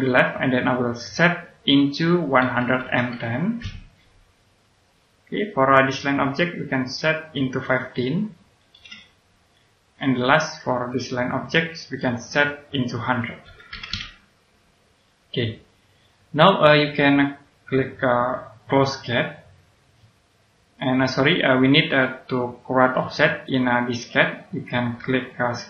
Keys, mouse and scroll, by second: 2.3 KP_1, 3.5 KP_0, 4.9 click, 8.6 KP_1, 10.0 click, 13.4 KP_1, 13.7 KP_0, 15.0 click, 15.8 scroll down 1, 16.1 middle click, 18.5 click, 21.1 middle click, 23.0 click, 24.1 middle click.